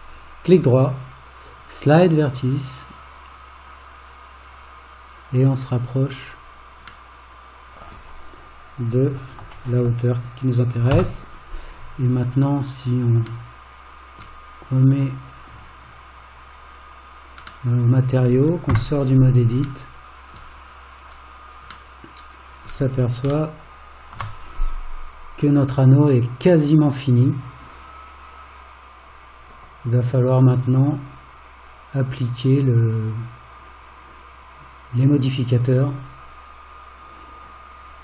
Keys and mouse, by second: 0.5-6.3 right drag, 7.1 middle click, 11.0 alt+z, 13.5 middle click, 17.7 middle click, 18.8 Tab, 19.9 middle click, 22.0-22.7 middle drag, 23.5-24.2 shift+middle drag.